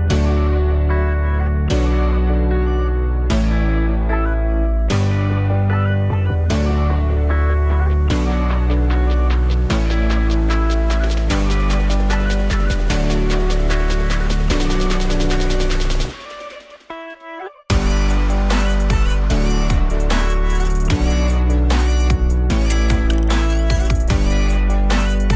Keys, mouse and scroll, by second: 1.2-9.2 drag, 8.3-9.1 scroll down 1, 9.9-17.7 drag, 14.3-15.1 scroll down 1, 23.1 click, 24.1 click, 24.9-25.3 drag.